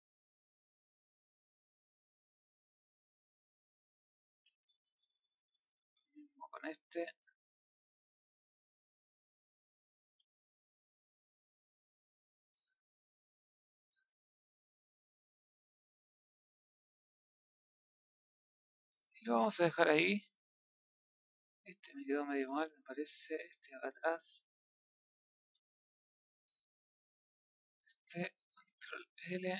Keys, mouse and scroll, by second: 0.7 click, 2.5 scroll down 1, 2.7-4.2 middle drag, 4.2 a, 6.0-7.1 drag, 8.5 click, 10.9 scroll down 4, 11.2 middle click, 12.1 scroll up 2, 12.9 click, 16.3-17.9 middle drag, 18.2 middle click, 19.1-20.3 middle drag, 20.3-20.9 scroll up 3, 20.9 middle click, 22.4 Tab, 23.0 click, 23.4 middle click, 24.0-25.5 middle drag, 25.5 Tab, 25.6-27.4 middle drag, 27.4 click, 28.6 ctrl+l.